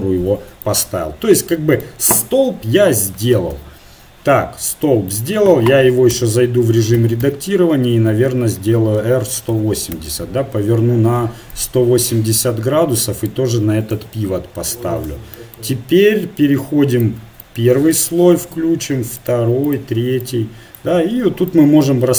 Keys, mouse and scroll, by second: 3.5 KP_7, 6.1 Tab, 7.0 a, 7.2 a, 9.0 r, 11.5-13.2 drag, 13.9 KP_1, 15.1 Tab, 16.9-19.0 drag, 19.2-20.2 drag, 20.3 middle click, 22.0 middle click.